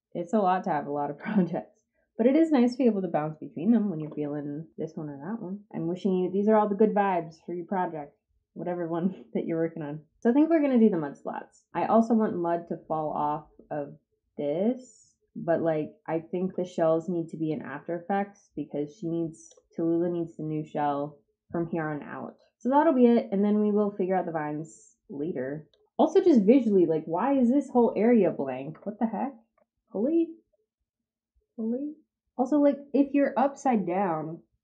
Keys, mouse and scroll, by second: 10.2-11.7 drag, 11.7 scroll up 2, 12.2 scroll up 2, 17.4-19.4 drag, 22.5-25.7 drag, 26.9-27.9 drag, 29.5 ctrl+z.